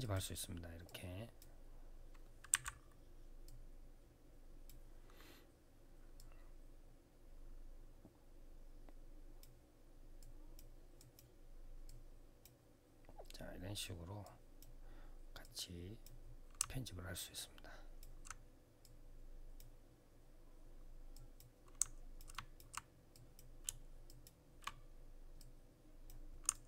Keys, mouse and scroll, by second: 0.6 click, 2.3 w, 3.2 click, 9.9 click, 10.7 click, 11.6 click, 14.0 click, 15.2 click, 16.3 alt+click, 18.6 click, 20.9 click, 21.5 alt+click, 21.9 click, 22.1 click, 22.9 click, 23.8 shift+click, 25.1 click, 26.3 alt+click.